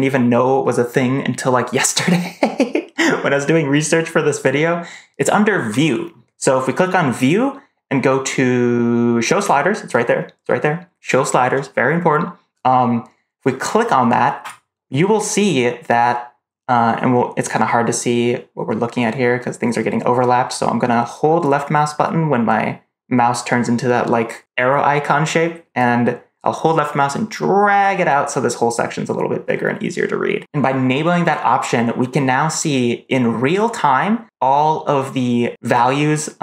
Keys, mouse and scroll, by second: 7.0-14.4 drag, 25.7-28.2 drag.